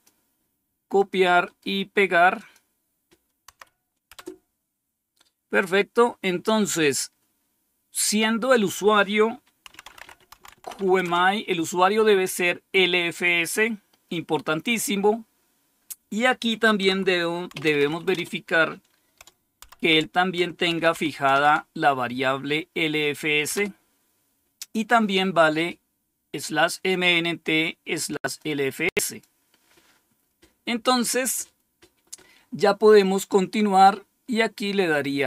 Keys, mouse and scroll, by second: 0.9 click, 1.3 right click, 2.3 click, 3.4 Right, 4.0 Return, 9.4-11.1 typing, 16.7-18.2 typing, 19.6-21.7 typing, 23.4 Return, 26.8-28.3 drag, 29.0 click, 34.8 click.